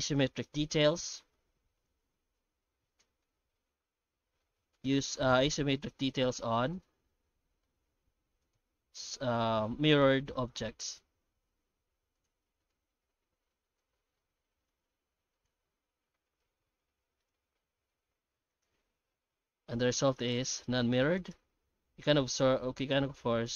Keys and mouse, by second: 3.0-7.6 middle drag, 16.4-18.2 middle drag, 17.7 Tab, 18.5 right click, 19.5 g, 20.4 right click, 20.6 g, 21.5 Tab, 21.9 shift+q.